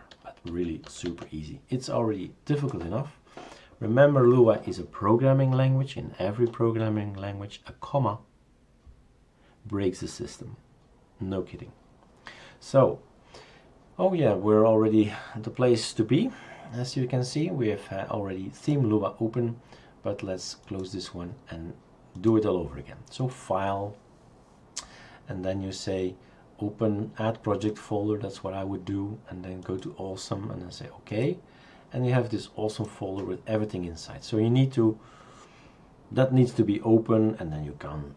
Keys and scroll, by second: 0.9-1.3 typing.